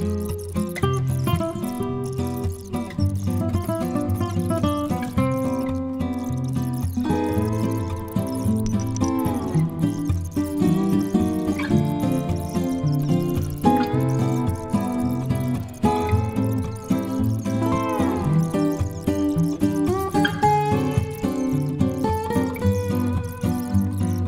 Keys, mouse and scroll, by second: 2.8 click, 3.2 click, 3.9 scroll down 1, 4.3 click, 6.9 click, 8.3 click, 12.5 super+5, 12.8 click, 13.0 click, 13.2 right click, 13.2 click, 13.9 click, 14.3 click, 14.5 a, 16.7 click, 16.9 click, 17.2 click, 17.6 click, 17.9 click, 18.4 click, 18.5 click, 18.7 click, 18.9 click, 19.1 click, 19.8 click, 20.9-22.3 drag, 22.8 click, 23.1 right click, 23.3 click, 23.7 right click, 23.8 click, 24.2 right click.